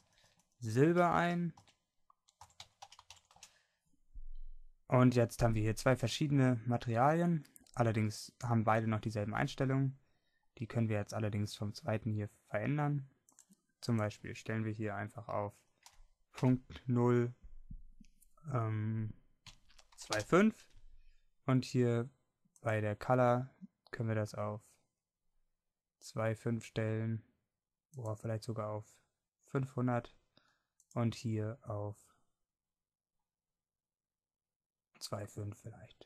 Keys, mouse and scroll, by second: 3.5 Delete.